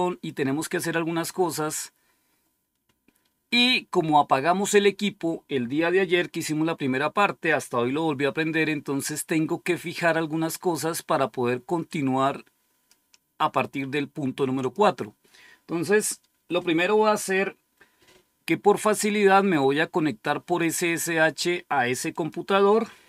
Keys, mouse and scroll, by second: 11.7-13.5 drag, 14.4 click, 22.0 click.